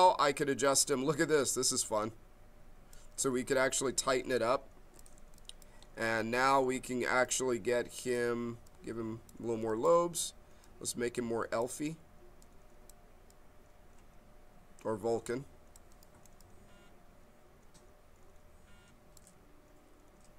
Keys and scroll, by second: 3.3 ctrl+z, 4.2 b.